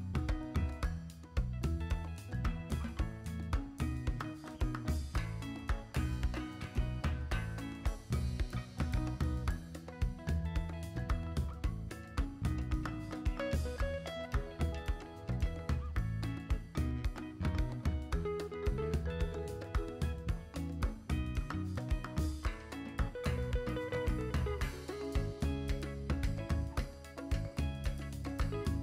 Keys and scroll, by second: 12.0 x, 12.8 v, 22.7 g.